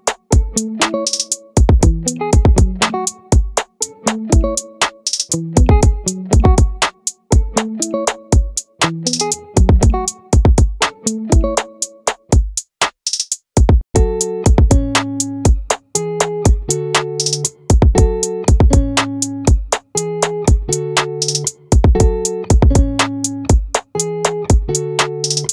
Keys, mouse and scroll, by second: 0.7-3.7 middle drag, 3.7 e, 6.8 click, 7.2 middle click, 7.8 click, 8.2 middle click, 10.8 a, 12.6-14.0 middle drag, 15.4 Tab, 17.4 a, 21.0-25.5 middle drag.